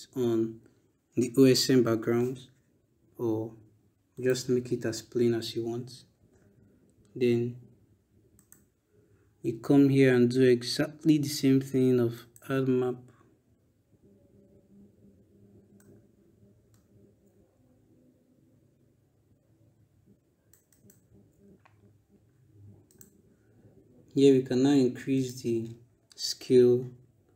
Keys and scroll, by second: 26.0 BackSpace.